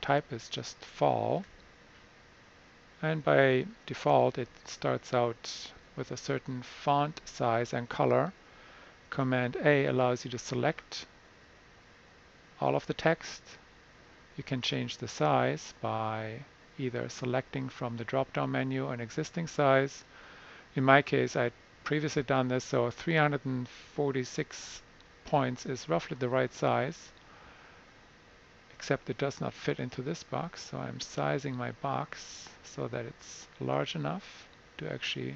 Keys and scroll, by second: 1.3 typing, 4.3 super+=, 5.6 -, 9.4 super+a.